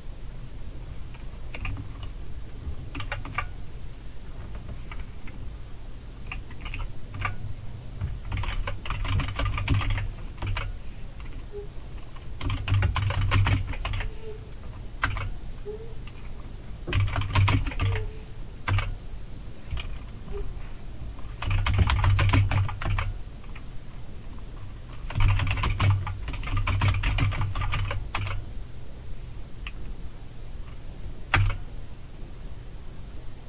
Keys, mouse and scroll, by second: 2.9 super+r, 6.6 super+Up, 8.1-10.3 typing, 10.4 Return, 12.2-14.6 typing, 15.0 Return, 16.7-18.7 typing, 21.2-23.0 typing, 24.9-28.3 typing, 31.4 Return.